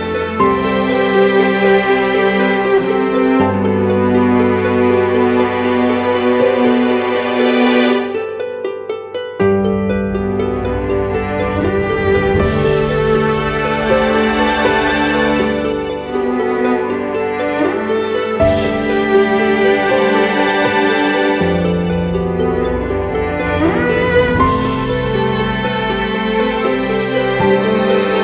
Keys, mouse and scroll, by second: 18.6 ctrl+t, 19.3 alt+shift+click, 23.0 Return.